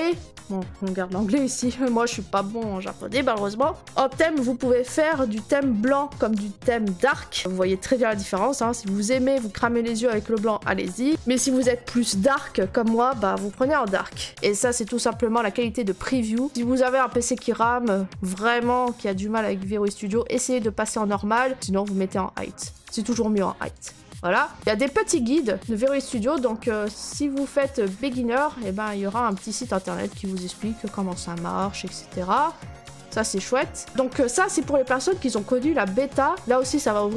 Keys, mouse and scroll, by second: 5.5 click, 6.3 click, 7.9 click, 10.9 click, 11.1 click, 20.5 click, 22.7 click, 23.8 click, 24.8 click, 29.3 click, 30.2 middle click, 30.2 middle click, 30.2 middle click, 30.5-32.0 scroll, 32.9 click.